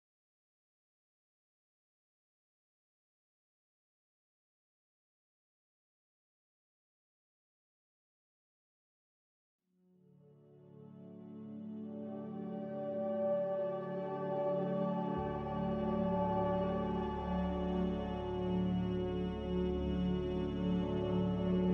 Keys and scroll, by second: 8.5 c, 18.0 z, 20.1 typing, 21.3 Return.